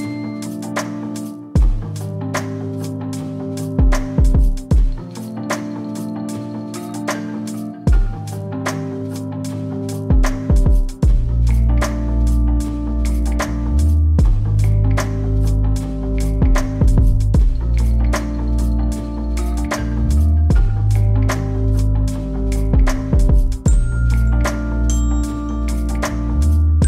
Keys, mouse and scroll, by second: 0.0-0.7 typing, 0.8 Return, 2.2 click, 2.7-3.4 typing, 4.9 click, 7.9 click, 8.8-10.0 typing, 12.4 click, 13.7-14.4 typing, 16.0 click, 17.1-19.6 typing, 19.0 click, 19.4 scroll up 1, 20.7-22.3 drag, 26.0-26.8 typing.